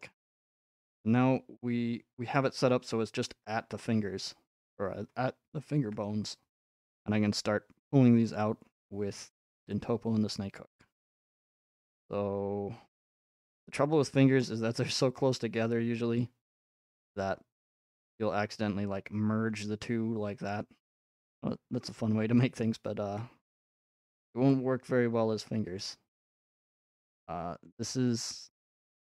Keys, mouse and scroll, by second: 0.7-2.6 middle drag, 3.3 middle click, 4.7-5.9 drag, 5.9-6.4 scroll up 6, 8.3 click, 9.8 click, 11.8 click, 12.1 f, 13.2-15.3 drag, 17.8-19.9 drag, 20.5-22.6 drag, 26.7-29.1 drag.